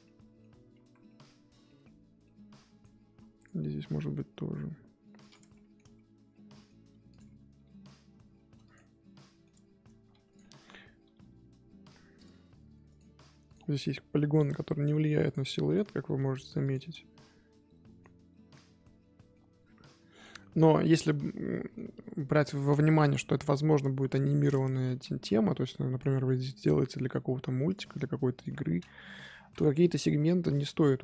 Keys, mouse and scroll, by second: 0.0-0.7 middle drag, 0.7 z, 1.0-1.4 middle drag, 1.4 z, 1.6 middle drag, 1.8 scroll down 1, 2.0 Tab, 2.2-3.3 middle drag, 3.3 click, 3.5 scroll up 1, 3.8 g, 5.5 middle drag, 5.8 Tab, 6.3 middle click, 6.9 2, 7.1 click, 8.8 middle click, 9.5 Tab, 9.8 Tab, 10.1 2, 10.2 click, 10.4 middle click, 11.0 g, 13.4 click, 14.3 click, 15.7 click, 16.8-19.6 middle drag, 19.6 Tab, 19.8 middle click, 20.6 Tab, 20.8 middle click, 21.1 scroll up 1, 21.4-23.9 middle drag, 23.9 KP_1, 24.7 z, 25.4 click, 26.5 middle click, 27.0 scroll down 2, 27.6 click, 28.3 ctrl+click, 28.7-29.0 scroll down 2, 29.0 KP_1, 29.3 scroll up 1, 30.0 z.